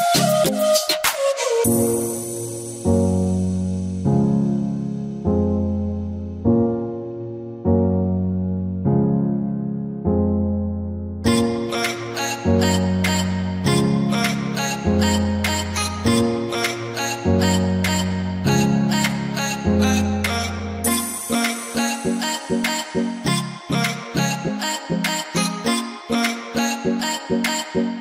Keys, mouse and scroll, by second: 5.9-6.4 scroll down 1, 6.4 v, 6.5 click, 7.1-8.8 alt+scroll down 2, 9.1 scroll down 1, 9.2-9.6 scroll up 1, 11.2 p, 13.2 click, 14.9-16.9 drag, 16.9 click, 17.8 ctrl+z, 18.8-21.6 drag, 22.5-25.4 drag, 25.4 ctrl+z, 26.0-28.0 ctrl+drag.